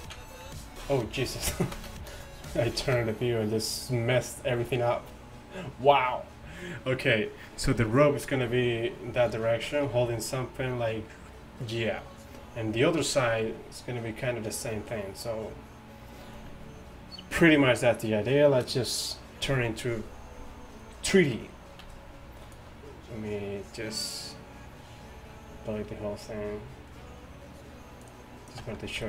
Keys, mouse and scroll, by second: 8.5-10.0 d, 14.2 middle click, 14.6 middle drag, 15.1 middle click, 21.9-24.1 d, 28.1 d, 28.2 d, 28.6 d, 28.6 d.